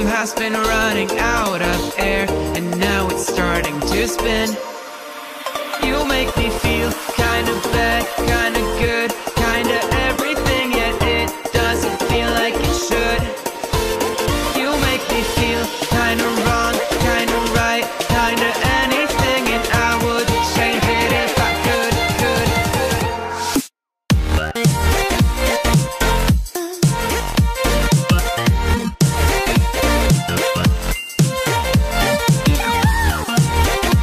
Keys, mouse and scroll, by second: 0.4-1.5 middle drag, 2.4 middle click, 3.6-4.0 scroll down 2, 4.0 middle click, 4.4-5.7 scroll up 1, 5.8 KP_1, 8.9 shift+z, 9.5 click, 10.8 click, 12.0 Delete, 13.4 click, 15.3 click, 18.3 click, 19.3 click, 19.7 middle click, 21.3 KP_3, 22.2 shift+z, 22.7 click, 23.4 click, 26.2 Delete.